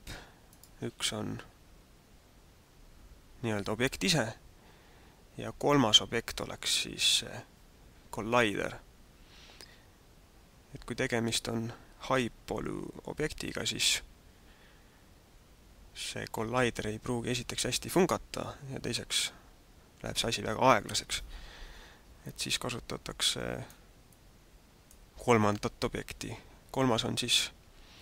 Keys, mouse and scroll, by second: 0.5 right click, 22.3 middle click, 24.1 middle click.